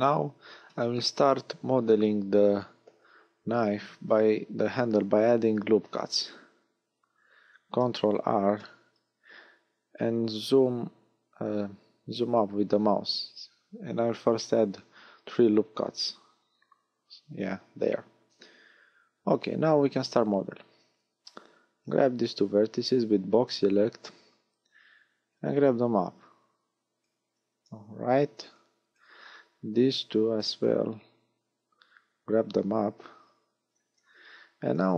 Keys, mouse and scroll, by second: 7.3 ctrl+r, 15.3 click, 18.7 a, 21.7 b, 25.3 click, 27.2 a, 28.4 b, 30.6 click, 33.6 a, 34.8 b.